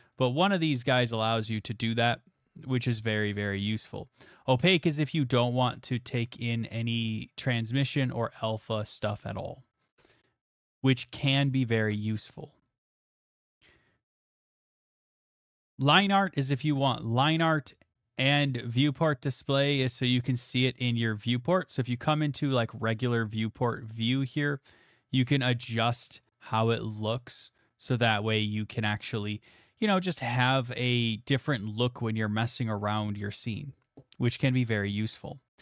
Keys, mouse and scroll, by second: 0.7 middle click, 2.1 click, 2.7 click, 3.8 click, 4.3 middle click, 4.4 click, 10.4-10.8 scroll, 11.4-12.4 scroll, 12.7-13.2 scroll, 13.9 click, 15.4 scroll, 15.9 click, 16.1 scroll, 17.6 scroll, 22.3 click, 25.4-27.3 drag, 29.0 click, 29.9 middle click, 30.1-32.5 scroll, 32.5 scroll, 34.1 scroll, 35.5 scroll.